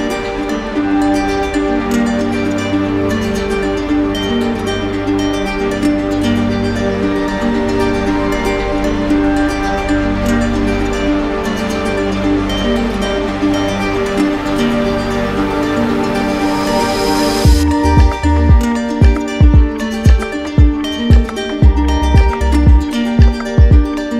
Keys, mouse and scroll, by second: 0.4 click, 4.8 click, 6.7 click, 7.3 alt+click, 7.7 alt+click, 8.2 shift+click, 9.0 alt+click, 9.9 q, 12.2 z, 12.9 click, 14.8 click, 15.0 click, 16.2 alt+click, 16.2 alt+click, 18.0 p, 18.7 p, 22.7-23.9 alt+drag.